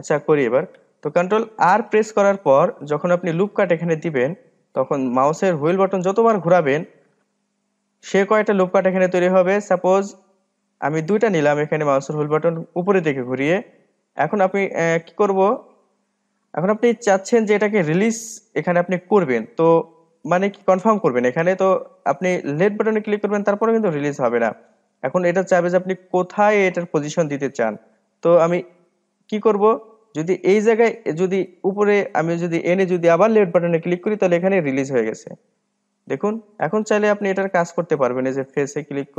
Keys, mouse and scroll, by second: 2.7 ctrl+r, 36.7 click, 37.2-37.6 scroll down 3, 37.6 middle click, 38.2-39.1 drag.